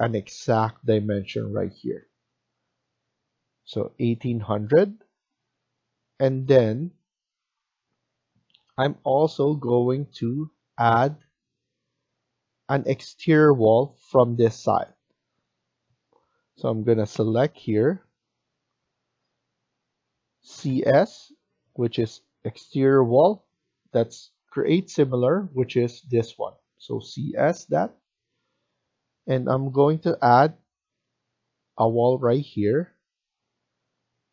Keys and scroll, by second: 3.3 Escape, 3.6 Escape, 20.2-21.1 typing.